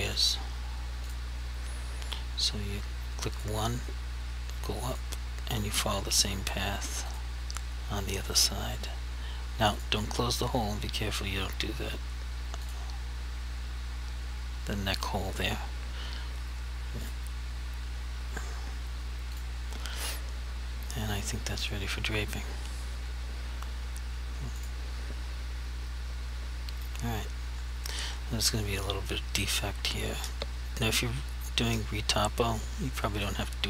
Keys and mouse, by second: 1.1 click, 12.6 click, 24.7 click.